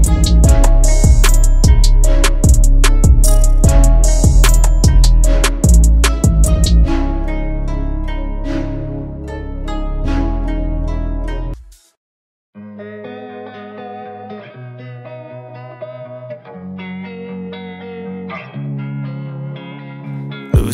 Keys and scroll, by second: 3.0 9, 3.5 /, 3.9 7, 5.0 Return.